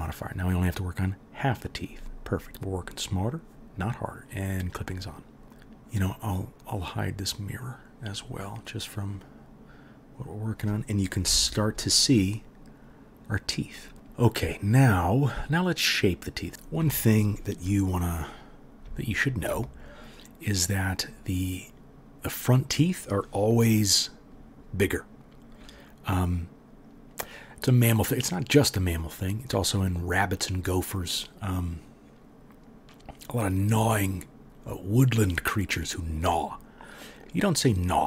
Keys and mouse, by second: 4.5-7.6 drag, 7.7-18.1 drag, 11.2 KP_1, 16.4 middle click, 16.5 KP_1, 18.1 middle click, 18.3 click, 19.0 alt+middle click, 19.1-38.0 alt+drag.